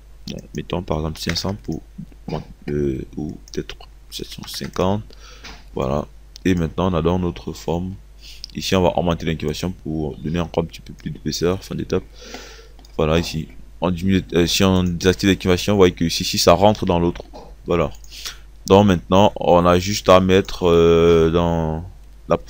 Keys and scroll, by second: 1.2 KP_5, 1.4 KP_0, 3.6 KP_7, 4.3 KP_5.